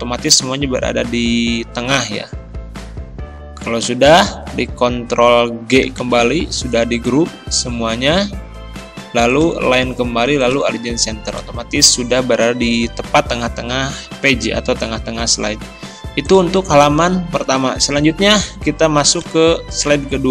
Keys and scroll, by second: 5.9 ctrl+g.